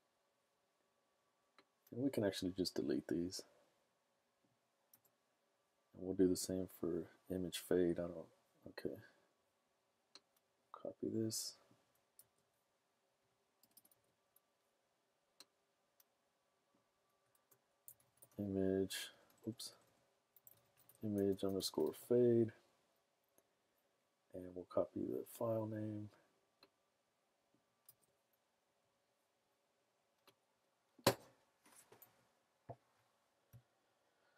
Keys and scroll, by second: 4.9 BackSpace, 12.2 super+c, 13.7 Return, 14.0 super+v, 17.7-21.9 typing, 27.9 super+c, 32.0 super+v.